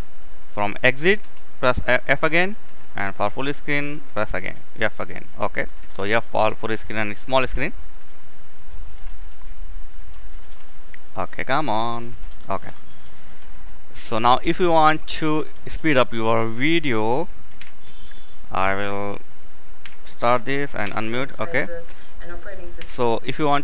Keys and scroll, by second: 17.2 k, 20.3 m, 22.2 k.